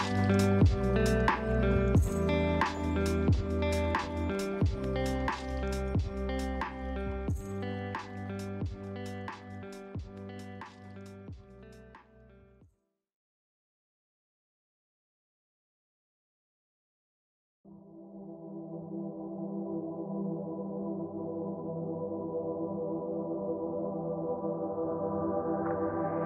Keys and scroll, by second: 4.3 ctrl+space, 8.3 ctrl+shift+[, 10.2 ctrl+space, 13.9 ctrl+z, 14.6 ctrl+space, 16.0 ctrl+z, 17.5 ctrl+space, 21.2 ctrl+shift+[, 25.6 ctrl+space.